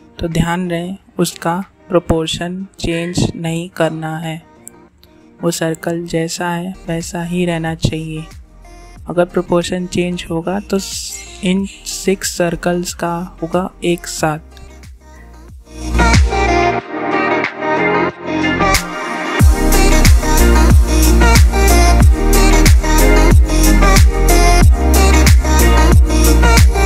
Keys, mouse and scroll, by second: 2.3-6.2 drag, 6.2-9.4 drag, 9.4-13.5 drag, 13.5 ctrl+z, 14.1-17.4 drag, 17.4-24.1 drag, 24.1-26.8 drag.